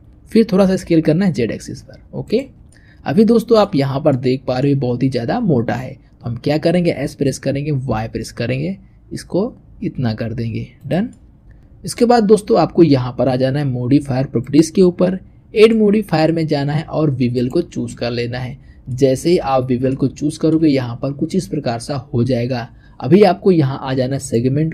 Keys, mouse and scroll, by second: 0.5 s, 2.6-6.9 middle drag, 6.9 s, 11.0-11.4 middle drag, 14.2 click, 15.4 click, 17.4-18.2 drag, 18.2-18.7 scroll up 2, 18.7-19.3 shift+middle drag, 19.3-19.8 scroll up 2, 19.8-22.7 shift+middle drag, 24.0-24.7 drag.